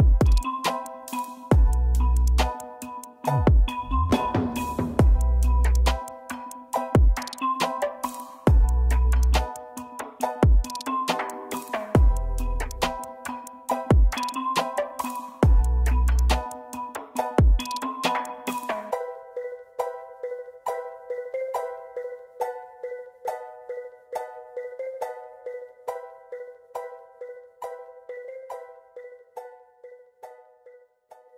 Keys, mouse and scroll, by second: 0.5-1.2 typing, 6.3 Right, 8.8 Down, 9.6 Up, 9.9 Down, 10.3 Right, 10.7 Right, 11.1 Right, 12.2 shift+click, 16.1 Up, 16.4 Left, 16.8 Left, 16.9 Left, 17.1 Left, 17.2 Left, 17.4 Left, 17.5 Left, 17.7 Left, 18.0 Left, 18.2 Left, 18.6 double click, 19.5 ctrl+z, 21.2 double click, 22.6 z, 23.5 ctrl+space, 24.7 \, 30.0 \, 30.9 Right, 31.2 Down.